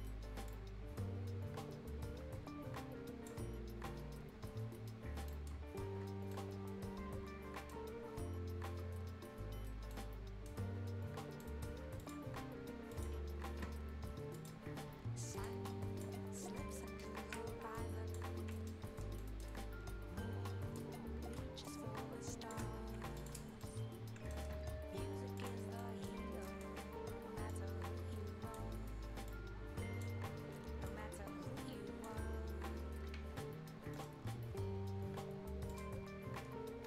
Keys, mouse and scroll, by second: 0.5-5.0 drag, 5.0-5.3 shift+scroll up 1, 5.3 shift+right click, 5.6-6.0 shift+scroll down 1, 6.0 shift+scroll up 1, 6.3-8.0 shift+right drag, 8.0 shift+scroll down 1, 8.4-9.3 shift+scroll up 1, 9.6-9.9 shift+scroll up 1, 9.9-11.4 shift+right drag, 11.4 shift+right click, 12.0 shift+click, 16.2 shift+scroll down 1, 16.4 shift+right click, 16.9 shift+Delete, 17.1-17.7 shift+scroll up 1, 18.1 click, 18.3 shift+scroll down 1, 18.5 shift+right click, 18.8-19.2 shift+scroll up 1, 19.2 shift+right click, 21.9-23.2 alt+drag, 23.2 shift+click, 23.4 shift+scroll up 1, 23.6 shift+right click, 24.6-25.4 shift+scroll up 1, 25.4 shift+click, 25.8 shift+right click, 27.5-29.3 shift+drag, 29.6-32.3 shift+drag, 32.3-32.6 shift+scroll down 1, 32.6 shift+scroll up 1, 33.9 shift+middle click, 35.7 shift+click, 36.4 shift+scroll up 1.